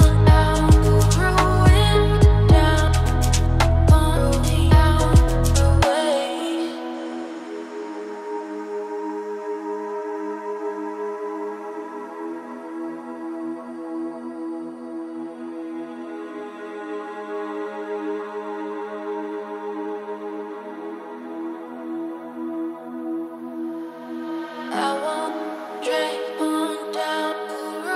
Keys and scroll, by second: 12.7 ctrl+space.